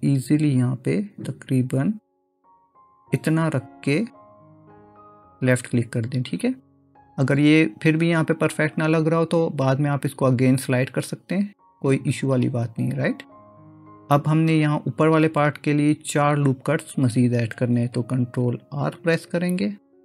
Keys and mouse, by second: 19.2 ctrl+r.